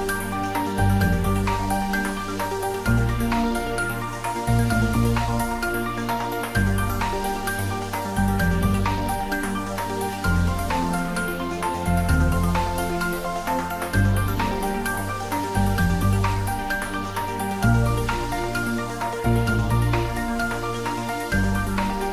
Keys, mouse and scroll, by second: 1.1 scroll up 1, 1.7-3.9 drag, 3.9 shift+d, 4.3 x, 7.2 x, 7.2 click, 7.7 shift+d, 8.1 x, 10.9 click, 11.4-15.3 middle drag, 15.3 click, 16.6-18.8 shift+drag, 18.8-20.9 typing, 21.7 click.